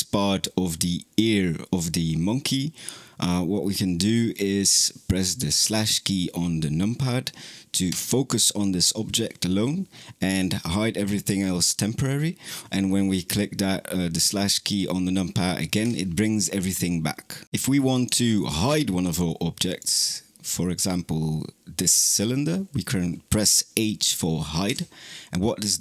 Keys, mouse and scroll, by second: 7.7 KP_Divide, 15.7 KP_Divide, 17.8 click, 19.5 click, 24.5 h.